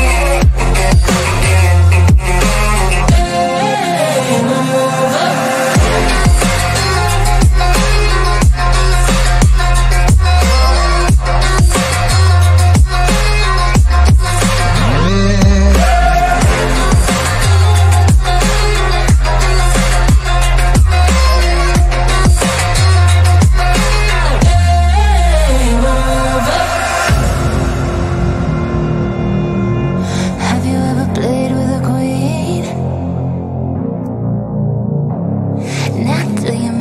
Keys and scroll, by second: 4.7 Delete, 5.8 F3, 7.6 ctrl+z, 17.3 Escape, 17.4 F3, 17.8 Escape, 18.0 shift+F2, 18.0 Escape, 22.4 shift+F2, 24.5 F3, 26.0 F3, 26.2 Escape, 26.9 Delete, 27.2 F3.